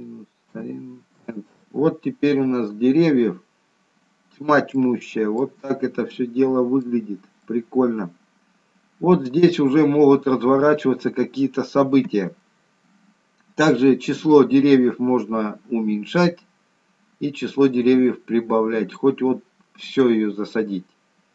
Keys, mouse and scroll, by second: 3.0-3.7 scroll down 4, 3.7 scroll up 1, 4.7 shift+middle click, 4.7 scroll up 1, 5.7 middle click, 5.7 scroll up 1, 7.2 scroll down 2, 7.5 middle click, 9.6-10.2 scroll up 5, 10.7-11.3 scroll down 2, 14.1 click.